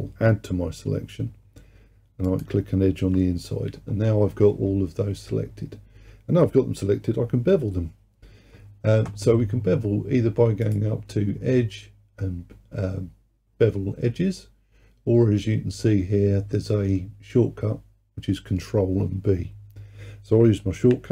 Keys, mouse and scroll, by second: 2.3 alt+shift+click, 3.9-4.8 scroll up 3, 10.7-13.8 drag.